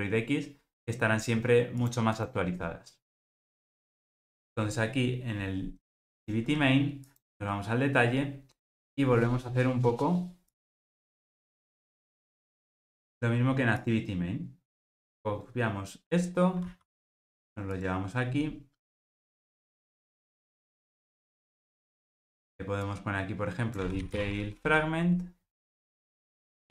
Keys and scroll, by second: 7.1 super+b, 7.4 super+b, 16.7 super+c.